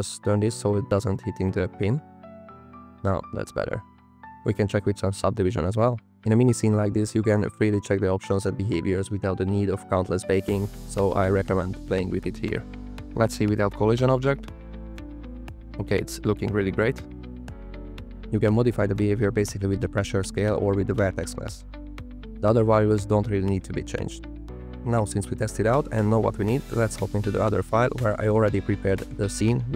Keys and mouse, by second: 0.2 KP_9, 0.4 KP_0, 0.6 KP_Enter, 4.0 space, 4.1 click, 5.5 click, 5.9 click, 9.0 click, 9.5 space, 12.8 g, 13.2 g, 13.5 x, 13.8 y, 14.7 click, 14.9 space, 15.6 click, 16.7 space, 17.7 click, 19.1 space, 19.4 click, 21.0 space, 21.9 click, 23.8 click, 25.1 click, 26.5 drag, 26.9 click.